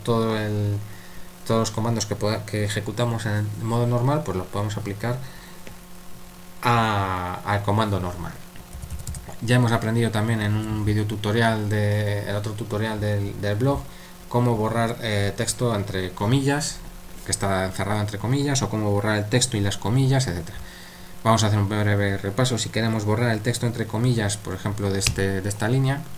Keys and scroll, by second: 8.7-9.1 typing, 10.5 super+1, 15.3 super+3.